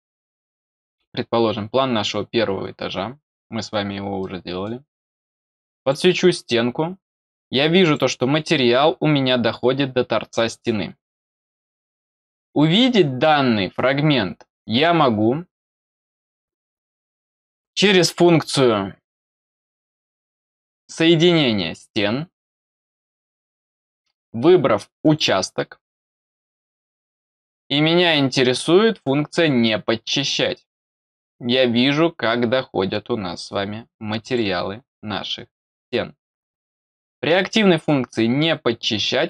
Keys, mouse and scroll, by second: 3.7 scroll down 1, 4.1 middle click, 6.4-6.8 scroll up 2, 7.8 click, 22.8 click, 25.0 click, 27.2 click, 34.2 click, 36.9 middle click, 36.9-37.4 scroll up 2, 37.3 middle click.